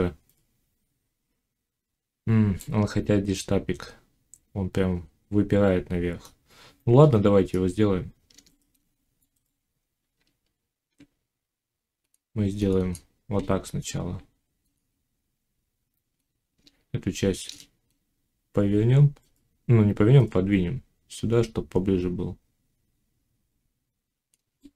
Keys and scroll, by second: 10.0 Tab.